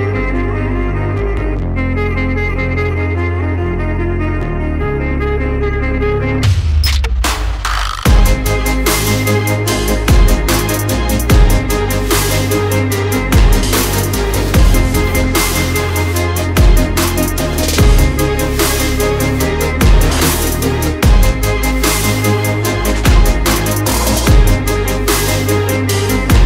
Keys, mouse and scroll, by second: 0.5 shift+click, 1.0 shift+Up, 1.8 alt+scroll down 1, 2.7 click, 3.2 double click, 3.4 alt+scroll down 1, 3.8 alt+scroll up 1, 4.1 alt+scroll down 1, 4.8 alt+scroll up 1, 6.0-6.4 scroll down 1, 6.8 alt+scroll up 1, 10.3 click, 13.8 click, 19.3 alt+scroll up 1, 19.5 alt+scroll down 1, 20.1 alt+scroll down 1, 20.3 alt+scroll up 1, 20.9 alt+click, 22.1 alt+scroll down 1, 22.6 alt+scroll up 1, 23.5 click, 24.6 alt+scroll up 1, 25.1 click.